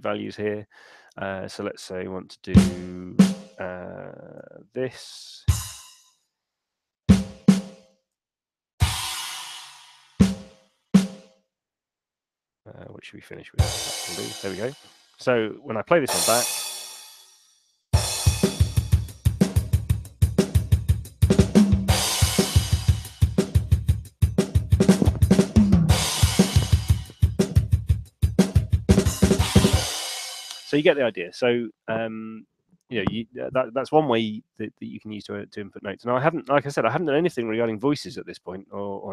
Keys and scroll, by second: 4.6 5, 6.5 4, 7.4 4, 8.2 5, 9.6 4, 11.1 4, 12.8 5, 14.0 5, 14.6 Escape, 16.8 p, 30.0 space.